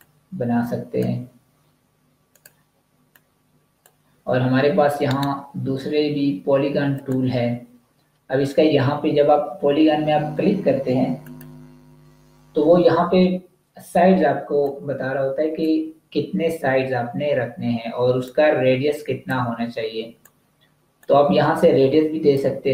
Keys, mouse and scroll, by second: 4.9 right click, 6.9 click, 11.1 click, 14.5 click, 18.2 click.